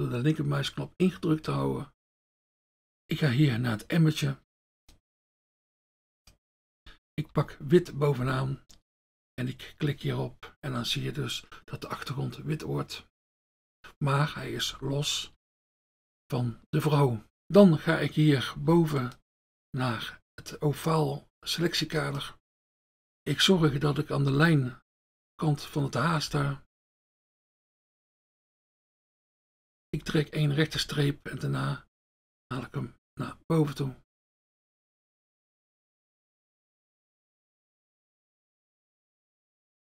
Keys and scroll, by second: 7.3 F1, 8.2 F1, 15.2 F1, 15.4 F1, 22.6 F1, 23.7 F1, 26.4 F1, 30.0 F1.